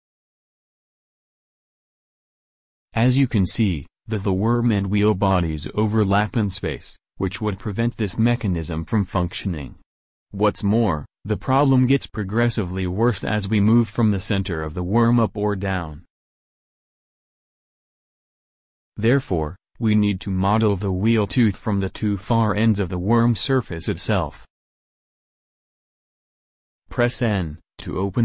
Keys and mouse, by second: 0.0 click, 0.9 middle click, 4.7-6.5 middle drag, 9.1-10.0 middle drag, 11.8 middle click, 14.2 middle click, 18.6 right click, 19.5 x, 20.6-21.4 middle drag, 21.4 KP_1, 27.2 n.